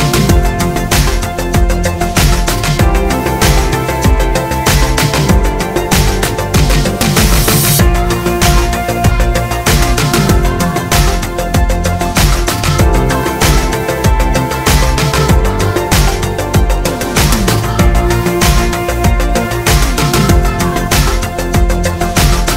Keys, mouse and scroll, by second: 0.0 Tab, 0.0-6.1 middle drag, 3.3 Tab, 6.1 click, 6.4 Tab, 6.7-8.6 middle drag, 7.0 shift+a, 8.6 click, 10.8-12.0 middle drag, 12.0 click, 12.9 ctrl+z, 13.7 click, 14.5 middle click, 15.2-16.4 drag, 16.6 ctrl+z, 17.3 click, 17.7 click, 18.0-21.5 middle drag, 18.4 shift+a, 19.5 s, 21.5 click.